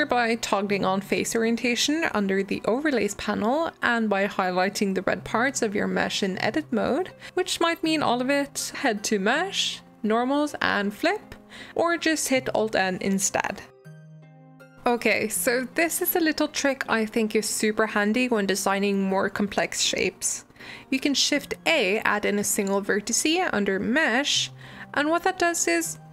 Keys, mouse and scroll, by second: 0.3-2.6 drag, 2.8-4.1 middle drag, 4.1 click, 4.3 Tab, 5.7 a, 8.8-10.4 drag, 12.0 Tab, 12.2 alt+n, 13.9-15.6 middle drag, 15.9 click, 16.2 click, 19.5 Tab, 19.9 click, 20.3 g, 25.5 shift+click, 25.9 g.